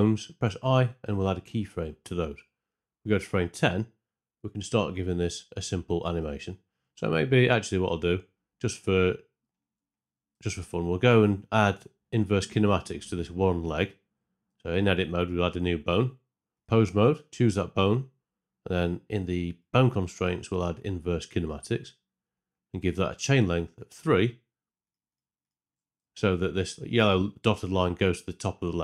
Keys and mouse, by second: 0.4 i, 4.3 click, 8.1 Tab, 10.2 z, 12.1 e, 13.6 click, 14.4 Tab, 20.4-21.5 drag, 24.8 click.